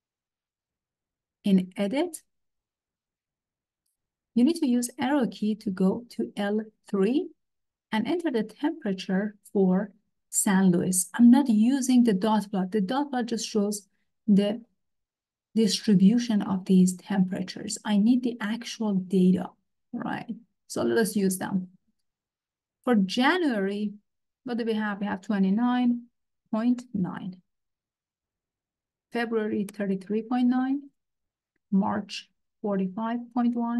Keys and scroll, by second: 2.9 Return, 6.0 Right, 25.6 2, 25.9 9, 26.5 ., 26.8 9, 27.9 Return, 29.4-31.1 typing, 32.3-33.7 typing.